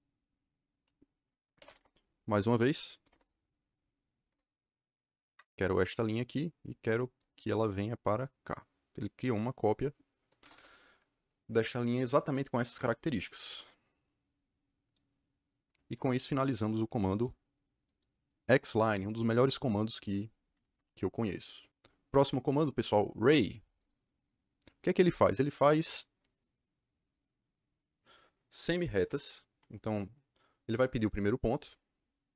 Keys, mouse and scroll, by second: 1.3-3.0 typing, 3.0 Return, 4.2 Return, 5.6 click, 9.2 click, 10.4 KP_Enter, 12.6 Escape, 17.1 click, 17.8 click, 19.3 Delete, 20.5 Escape, 23.7 click.